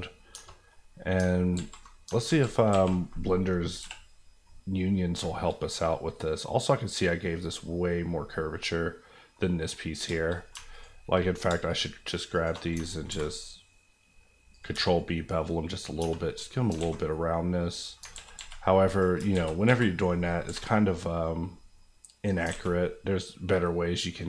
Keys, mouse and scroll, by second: 0.3 Tab, 0.7 middle click, 1.5 alt+z, 2.7 alt+a, 3.8 l, 4.0 KP_Decimal, 4.4 middle click, 5.1 shift+middle click, 5.5 scroll down 1, 5.8 middle click, 9.4 middle click, 9.9 scroll up 2, 10.2 shift+middle click, 10.3 middle click, 10.6 alt+middle click, 10.7 alt+click, 11.4 alt+click, 11.4 alt+shift+click, 13.1 ctrl+b, 14.5 click, 14.7 Tab, 14.9 middle click, 16.0 Tab, 16.3 middle click, 16.8 alt+a, 17.1 middle click, 18.1 z, 19.2 ctrl+z, 20.4 ctrl+b, 22.3 click, 22.4 alt+click, 22.5 alt+a, 23.1-24.2 middle drag.